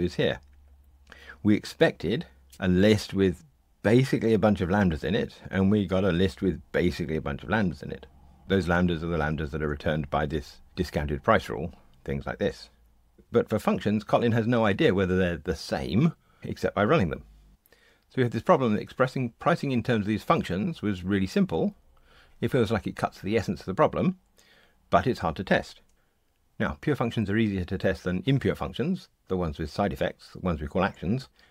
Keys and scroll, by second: 9.4 super+b.